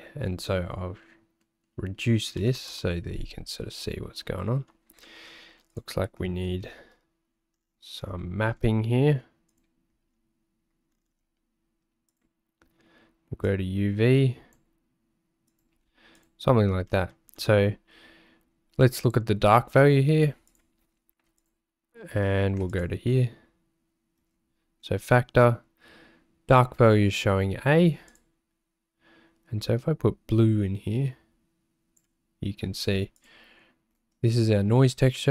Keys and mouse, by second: 5.2 middle click, 6.7 ctrl+t, 8.4 g, 13.4-14.8 drag, 15.5 click, 15.7 g, 16.9 middle click, 20.5 click, 28.1 click.